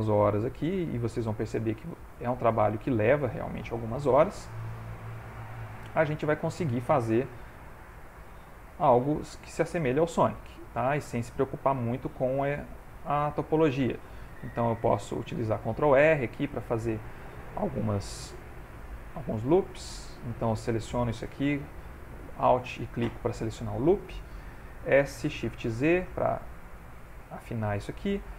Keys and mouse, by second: 0.4 click, 1.2 alt+click, 2.7 alt+shift+click, 3.7 g, 7.7 ctrl+r, 9.1 ctrl+z, 10.2 ctrl+r, 12.5 s, 14.4 ctrl+e, 15.7 ctrl+r, 18.5 s, 20.7 alt+click, 21.2 3, 21.6 alt+click, 24.9 s, 27.2 ctrl+middle click, 27.7 shift+middle click, 28.2 ctrl+middle click.